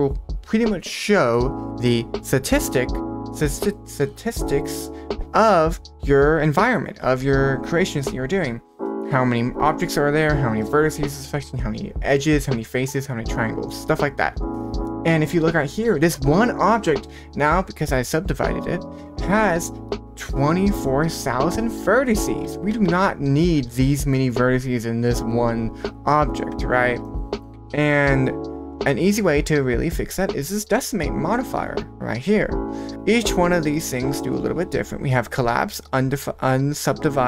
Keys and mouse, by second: 0.0 click, 14.8 middle click, 22.7 Tab, 23.5 1, 23.9 middle click, 26.5 Tab, 27.0 middle click, 28.4-30.7 drag.